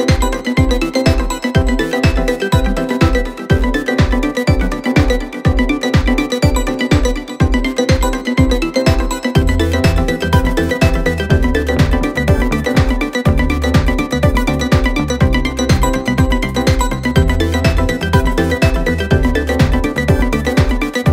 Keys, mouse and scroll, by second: 0.3-3.3 drag, 5.3 click, 6.6 click, 7.0 scroll down 4, 7.3-8.3 scroll up 11, 9.3 click, 12.2 click, 12.7-14.3 scroll down 3, 14.3 click, 16.7 click, 17.8 click, 18.4-19.7 drag, 20.5-21.1 scroll down 2.